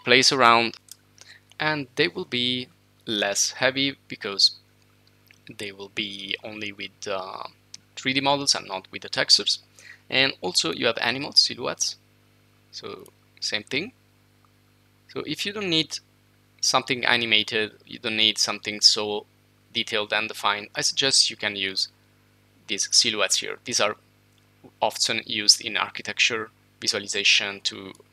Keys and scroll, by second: 0.7-1.6 typing.